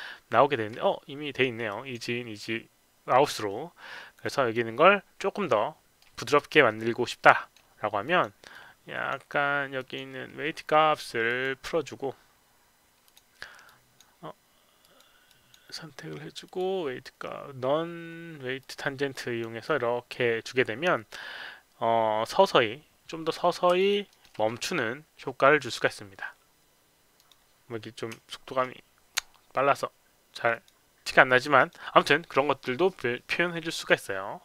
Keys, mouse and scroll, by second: 0.4 alt+middle click, 1.6 click, 4.2 click, 5.4 middle click, 6.6 middle click, 8.0 click, 8.5 click, 9.7 click, 11.2 click, 13.0 click, 13.6 click, 14.7 click, 15.2 click, 16.4 click, 18.5 click, 19.1 click, 19.6-22.3 middle drag, 23.2 click, 23.7 alt+click, 24.0 alt+middle click, 25.5 click, 27.1 click, 30.4 click, 31.5 click.